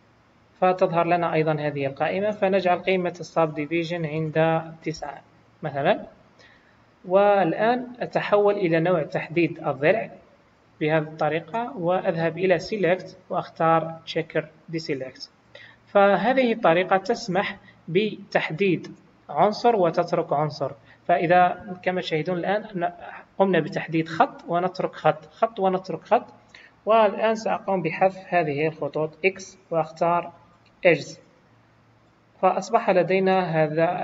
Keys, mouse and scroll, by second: 2.0 click, 14.6 click, 15.4 middle click, 16.4-17.7 scroll up 1, 21.8-24.9 scroll up 1, 26.3-28.4 scroll down 1, 28.4-29.3 scroll down 1, 29.3-31.0 scroll up 1, 29.3 x, 31.6-32.4 scroll down 3, 32.0 middle click, 33.6-34.0 scroll up 2.